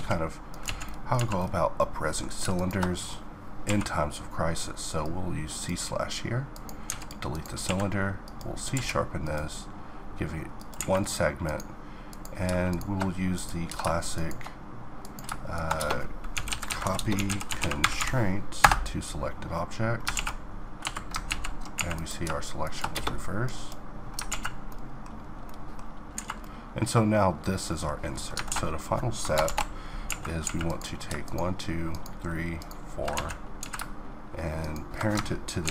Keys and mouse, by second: 0.2 z, 0.8 z, 2.1-3.2 drag, 3.2 q, 6.4 x, 7.3 q, 8.3 q, 10.4 a, 15.4 space, 17.0-18.2 middle drag, 19.7 alt+a, 20.4 Escape, 20.9 ctrl+z, 21.4 a, 22.5 space, 23.9 alt+a, 24.9-27.7 middle drag, 28.1 alt+a, 29.0 shift+Left, 29.6 a, 30.0 a, 32.7 z, 33.2 z, 35.2 ctrl+p.